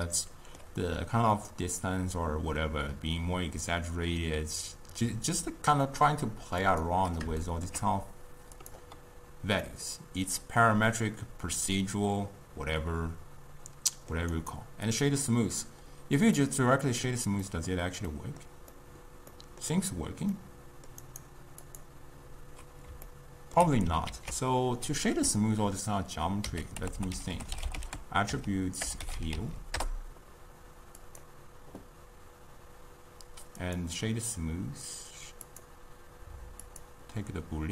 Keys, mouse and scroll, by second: 6.8 click, 7.5-9.3 shift+middle drag, 9.3-9.7 drag, 9.7-12.8 middle drag, 14.4-16.5 right drag, 16.5-21.2 middle drag, 21.2-23.2 right drag, 23.2-24.2 ctrl+middle drag, 24.2 ctrl+a, 27.0 t, 29.6 l, 33.7-36.7 drag.